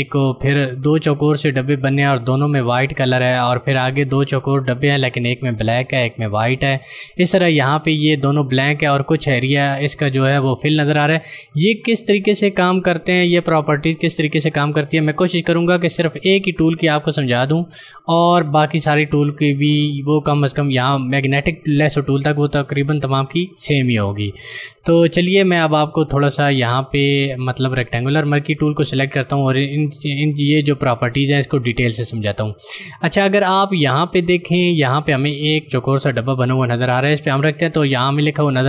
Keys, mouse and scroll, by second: 19.7 click, 26.0 ctrl+click.